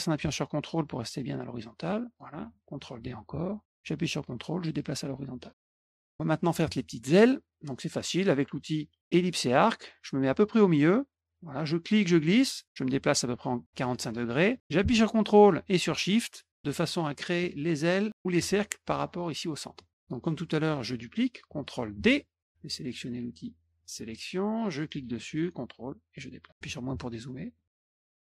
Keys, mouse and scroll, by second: 2.9 ctrl+d, 3.6-5.5 ctrl+drag, 5.6 middle click, 7.1 middle click, 9.5 click, 11.0-18.3 drag, 21.9 ctrl+d, 23.7 click, 24.7-26.4 drag, 27.5 middle click.